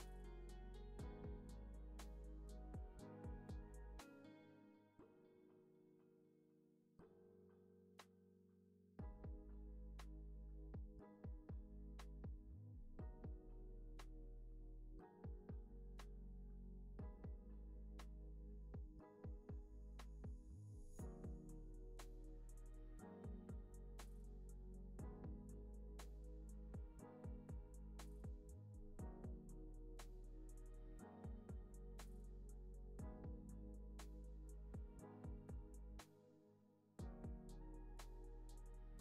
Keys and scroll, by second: 19.5 alt+x, 21.6 alt+z.